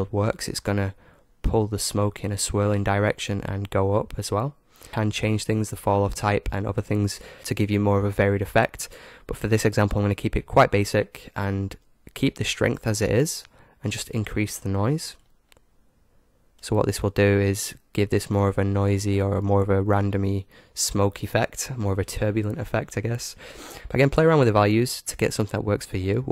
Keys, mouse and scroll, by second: 15.2-17.0 drag, 17.3-19.2 middle drag.